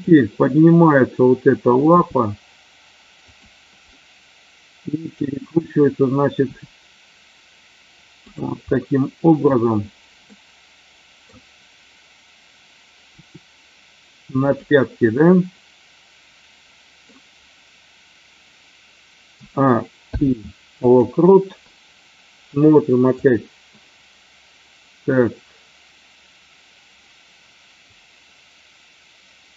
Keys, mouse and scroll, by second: 2.0 g, 3.2 click, 3.9-5.2 middle drag, 5.1 scroll down 1, 6.4 r, 8.2 click, 8.7 middle click, 10.3-11.2 middle drag, 13.2 r, 14.4 click, 14.9-16.9 middle drag, 19.2 a, 19.9 i, 23.1 click, 28.0-29.5 drag.